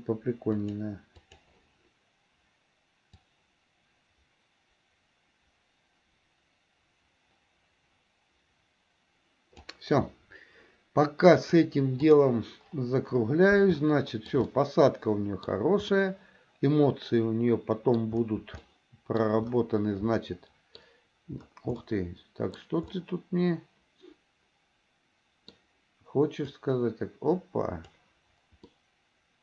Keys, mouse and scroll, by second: 0.7 click, 1.5 click, 3.4-9.9 drag, 11.4 click, 14.0 shift+middle click, 14.6 middle click, 16.1-18.2 middle drag, 18.8-19.4 shift+middle drag, 20.3 middle click, 21.9 middle click, 23.2-25.8 middle drag, 26.8-28.2 drag, 28.9-29.4 middle drag.